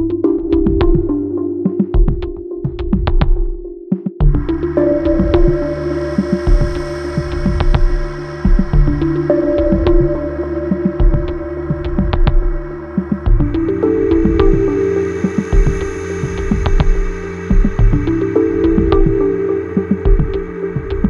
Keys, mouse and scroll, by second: 1.0 click, 1.3 double click, 3.1 click, 4.6 click, 8.1 click, 10.1 ctrl+click, 11.4 click, 13.8 ctrl+r, 14.3 click, 16.1 ctrl+r, 16.7 click, 17.4 ctrl+click, 19.6 click, 20.4 click.